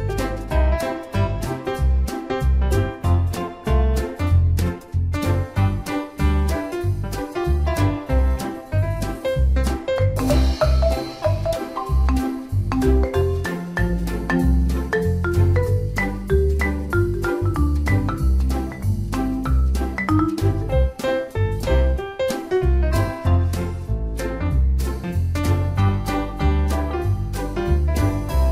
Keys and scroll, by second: 3.2 ctrl+d.